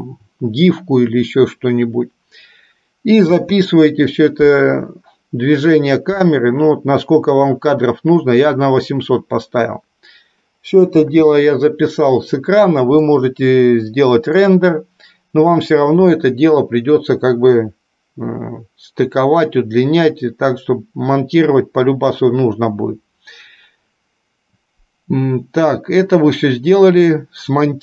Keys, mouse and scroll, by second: 3.4 space, 11.3 space, 13.3-14.8 middle drag.